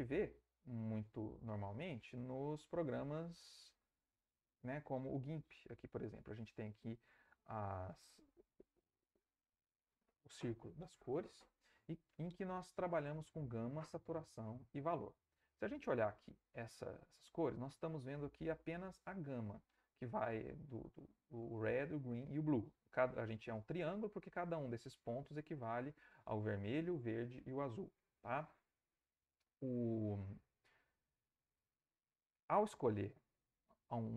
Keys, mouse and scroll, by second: 1.7 alt+Tab, 15.1 alt+Tab.